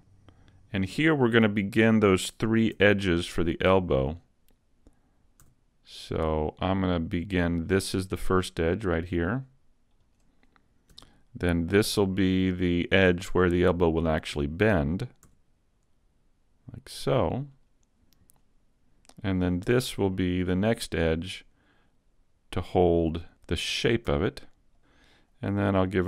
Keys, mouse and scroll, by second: 2.1 click, 2.8 s, 5.5 s, 10.1 click, 10.9 e, 14.1 click, 15.3 s, 17.7 click, 17.7 s, 19.7 e, 24.4 click.